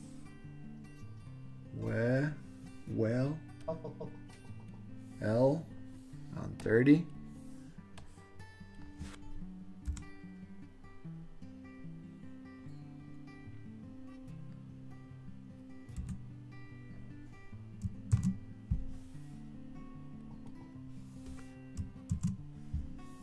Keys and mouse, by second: 3.8 click, 6.7-7.3 drag, 8.0-14.0 drag, 16.1 l, 18.2 super+c, 20.4 click, 22.1 super+v.